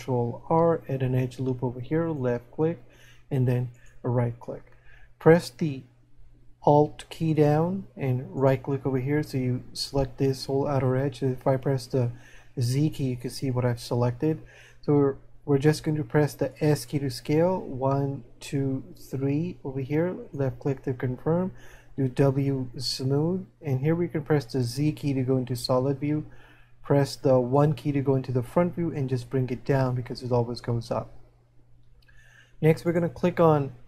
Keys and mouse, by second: 3.8 right click, 16.5 s, 29.7 click.